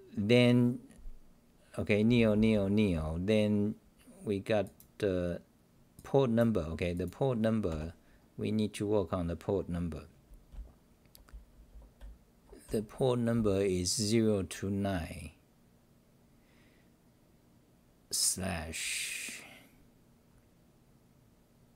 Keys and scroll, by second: 3.0 w, 7.7 -, 8.2-8.8 scroll up 4, 9.5-10.5 scroll up 5, 10.5-13.3 typing.